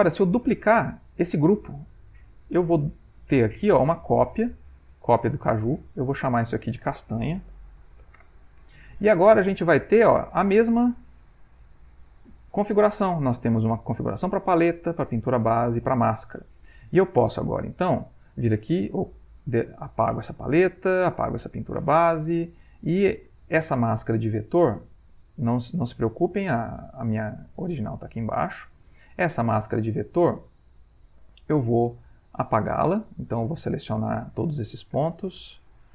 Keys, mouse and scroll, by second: 4.8 click, 7.6 shift+a, 8.2 shift+Return, 10.0 click, 15.8 click, 18.0 click, 19.3 Delete, 21.0 click, 21.4 Delete, 22.8 click, 26.0 click, 28.5 click, 31.6 click, 32.6 click, 33.3 click, 34.1 click, 35.1 click.